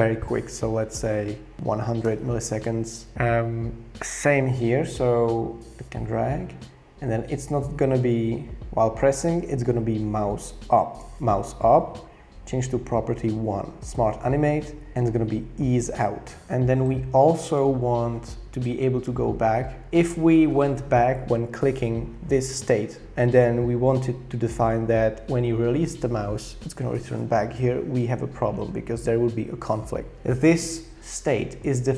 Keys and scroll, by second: 1.3-2.1 typing.